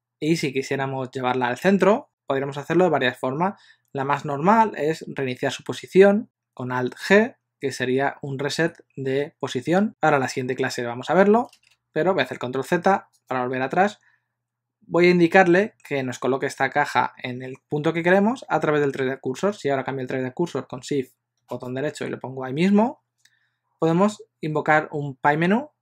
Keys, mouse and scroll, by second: 8.6 alt+g, 11.8 ctrl+z, 13.4 click, 21.6 shift+right click.